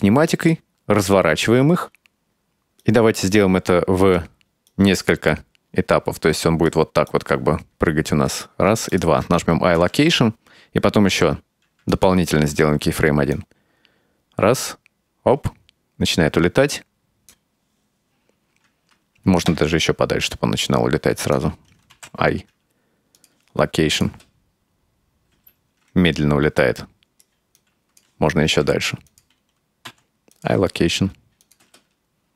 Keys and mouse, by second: 2.9-4.3 right drag, 4.7-6.7 right drag, 7.2-8.5 right drag, 9.0 shift+right click, 9.8 i, 11.2 i, 13.4-17.4 drag, 19.6 g, 22.0 i, 24.0 click, 24.2 space, 25.4 space, 26.6-27.3 right drag, 27.6 click, 28.6 g, 29.9 i, 31.5 click, 31.7 space.